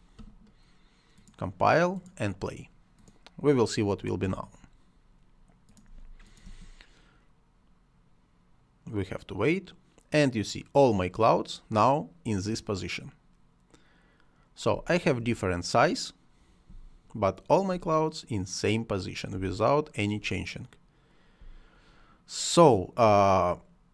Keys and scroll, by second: 5.9 space, 14.7 space, 16.7 space, 19.3 space, 21.4 space.